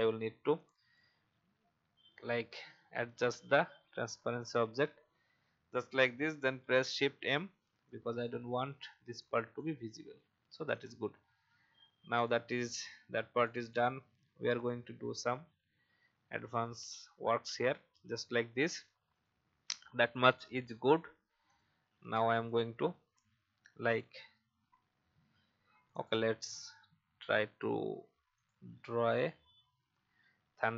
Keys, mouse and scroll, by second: 1.8-2.5 Up, 6.6 shift+m, 7.8 click, 11.1 alt+scroll down 1, 12.1 click, 12.8 alt+scroll down 1, 13.4 click, 15.4 click, 19.1-29.3 drag.